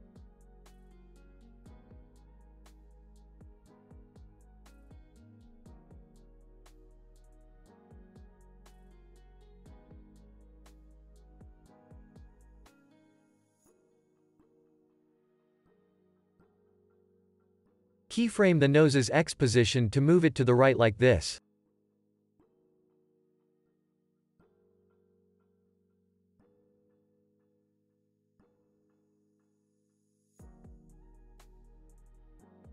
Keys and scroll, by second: 19.8 p, 28.0 x.